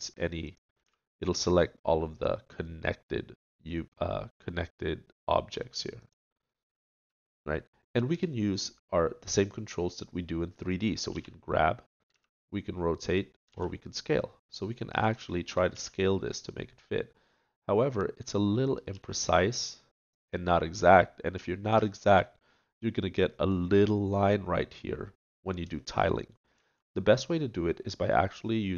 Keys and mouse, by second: 0.8 a, 11.1 g, 13.5 s, 15.7 s, 18.9 g, 21.1 click.